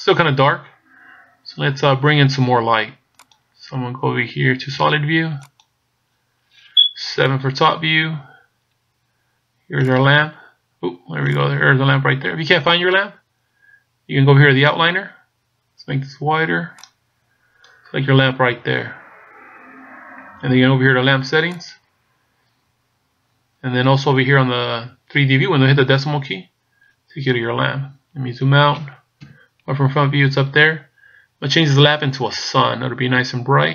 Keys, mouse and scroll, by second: 3.9 click, 5.7 click, 7.2 KP_7, 8.6-9.9 scroll down 1, 9.9 right click, 11.4 right click, 16.8 click, 22.6 click, 26.2 KP_Decimal, 27.7-28.2 scroll down 7, 29.2 KP_1, 31.9-32.4 scroll down 2.